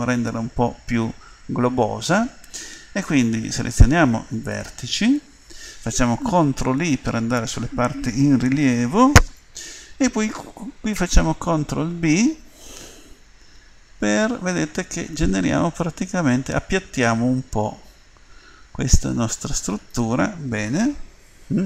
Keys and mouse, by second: 4.5-6.7 drag, 6.7 ctrl+i, 11.9 ctrl+b.